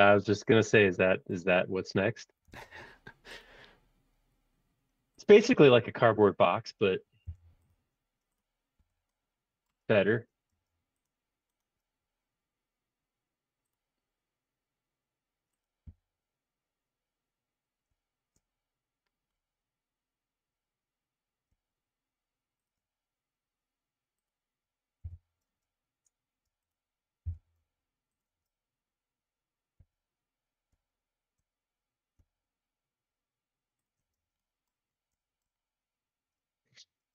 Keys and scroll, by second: 2.5 r, 7.4 p, 8.7 c, 10.6 space, 15.9 c, 25.1 m, 25.4 space, 26.4 space, 27.2 m, 34.2 space.